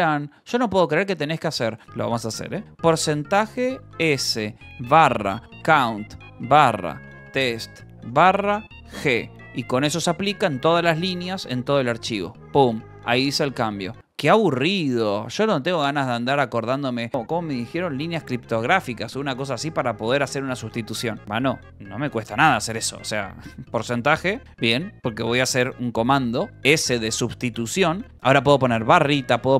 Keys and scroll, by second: 1.9-8.9 typing, 12.2 Return, 12.9 Escape, 23.6 space, 24.0 BackSpace, 24.5 shift+5, 26.0 s, 28.5-29.5 typing.